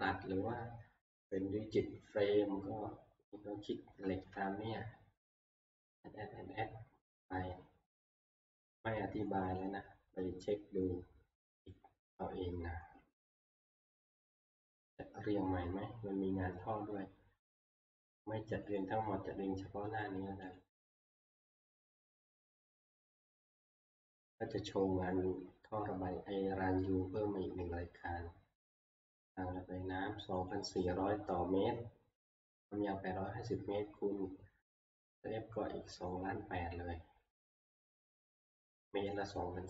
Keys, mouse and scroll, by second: 0.2-2.0 scroll, 3.8 scroll down 10, 7.0-8.5 scroll, 11.5 click, 18.8 click, 20.6 click, 21.2 click, 22.4 click, 27.1 click, 28.8 click, 30.5 click, 31.6 middle click, 36.1-39.6 drag, 36.1-36.6 scroll down 1.